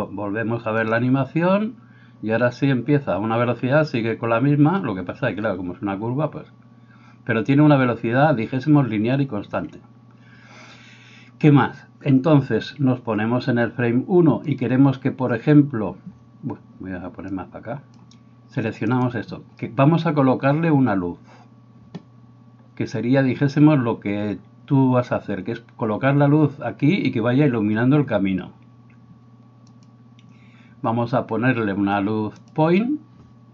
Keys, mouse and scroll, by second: 9.5 Escape, 18.9 middle click, 18.9 right click.